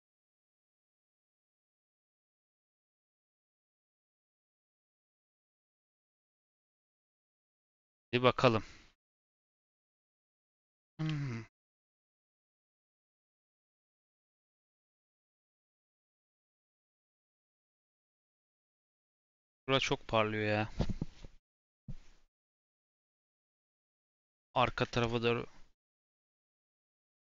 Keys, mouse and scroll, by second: 1.0 /, 1.5-2.7 middle drag, 2.7-3.1 scroll up 3, 3.1 middle click, 3.4-4.0 scroll down 1, 4.0 click, 4.3-4.7 scroll down 4, 4.7-6.1 middle drag, 6.1 click, 6.5 middle click, 6.9 scroll up 2, 7.3-9.6 middle drag, 9.6 n, 10.1 n, 10.4 scroll down 2, 10.6-12.8 shift+middle drag, 12.8-13.4 scroll up 2, 13.4 click, 15.8 r, 18.0-18.7 scroll down 1, 18.7-21.7 shift+middle drag, 26.3 click.